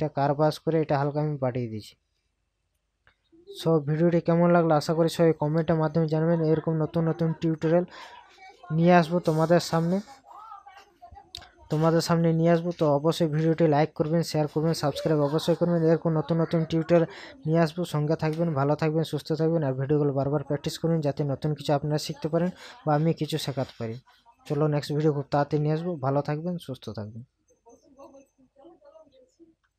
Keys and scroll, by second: 5.8 ctrl+KP_Add, 13.1 ctrl+KP_Subtract.